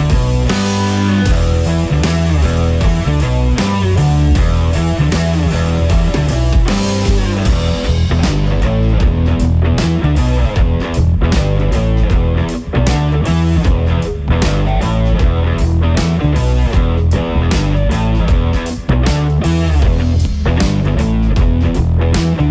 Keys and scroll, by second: 19.0 ctrl+r.